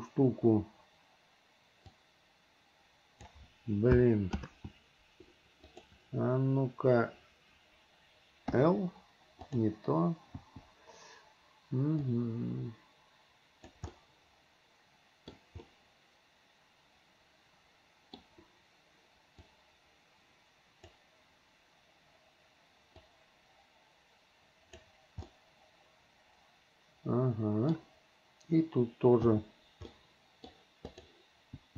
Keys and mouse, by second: 2.1-3.4 drag, 4.6 ctrl+z, 8.7 click, 10.6 click, 12.2-13.9 drag, 14.1-15.5 middle drag, 15.9-18.4 middle drag, 19.8-21.1 drag, 23.2-24.9 drag, 25.5-27.9 middle drag, 29.5 l, 30.1 middle click, 31.0 click.